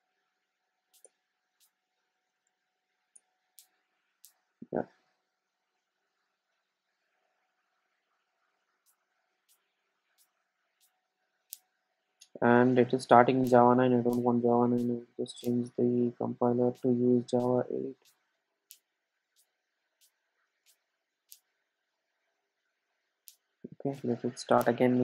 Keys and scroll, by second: 3.2 Return, 13.5 super+F2, 22.9 ctrl+alt+super+;.